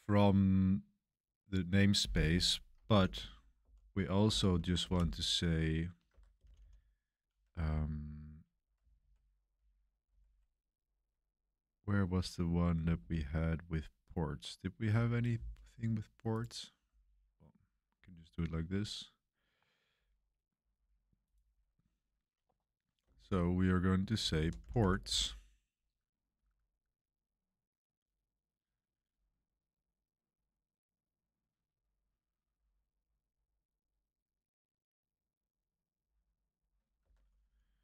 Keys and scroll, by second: 2.6-6.9 typing, 6.0 Escape, 7.5 Page_Up, 7.8 Page_Up, 8.0 Page_Up, 8.2 Page_Up, 8.7 Page_Down, 8.9 Page_Down, 9.5 Up, 10.0 Down, 10.8 Up, 12.7 Down, 13.6 Up, 23.0-25.5 typing, 36.9-37.8 typing.